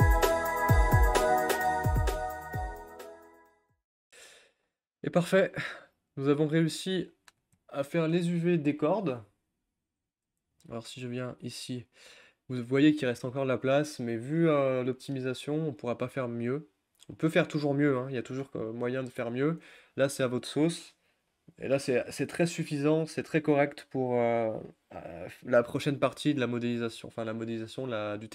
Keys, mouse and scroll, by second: 0.0-1.5 typing, 0.0 click, 0.4 click, 1.1 click, 1.4 click, 2.9 g, 3.2 click, 3.2 shift+click, 3.3 g, 3.5 click, 3.6 g, 3.9 click, 4.0 click, 5.3 a, 6.5 click, 14.1-14.8 scroll down 5, 14.8-15.2 scroll up 1, 15.2 middle click, 15.7 scroll up 1, 16.4 shift+middle click, 16.9 scroll up 1, 17.1-28.3 shift+middle drag.